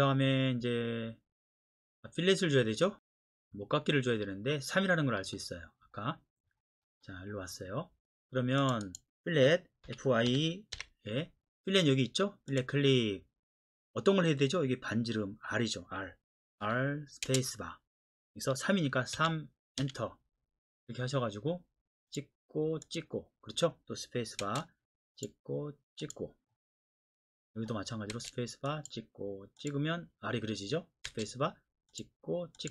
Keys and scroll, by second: 9.9 typing, 16.6-17.2 typing, 19.1-19.8 typing, 24.4 space, 28.1 space, 31.0 space.